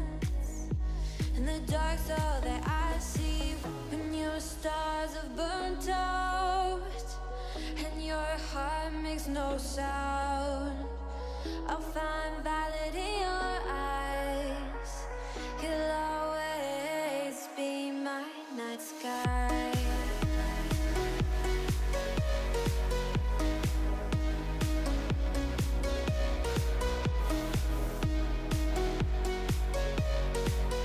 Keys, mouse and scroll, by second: 0.2 KP_1, 0.7-1.4 middle drag, 1.4-2.9 scroll down 4, 4.4-6.0 middle drag, 6.0 click, 6.2 middle click, 6.5 g, 7.5 click, 8.0 g, 9.0 click, 10.0 middle click, 10.5 KP_7, 10.8 g, 12.8-13.7 middle drag, 13.7 g, 17.2 scroll down 3, 17.4-18.4 middle drag, 18.4 scroll up 1, 18.7 g, 20.8-22.3 middle drag, 23.2 g, 25.2 click, 25.4 scroll down 2, 25.6-26.4 middle drag, 26.4-26.8 scroll up 1, 26.8 KP_1, 27.1-27.5 scroll up 6, 27.5 alt+z, 28.0 1, 28.2-28.6 drag, 28.6-29.7 shift+middle drag, 29.7 g.